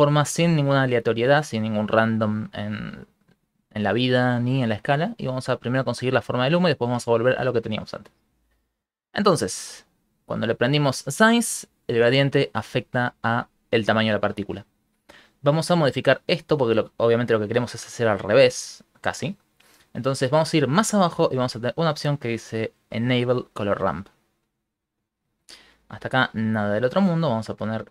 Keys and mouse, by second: 5.7 click, 8.5 middle click, 8.7 middle click, 9.1 middle click, 10.3 click, 10.9 click, 15.3 click, 16.1 middle click, 18.9 middle click, 19.5 middle click, 20.1 click, 20.9 middle click, 22.9 click, 23.7 middle click, 25.9 click, 26.7 click.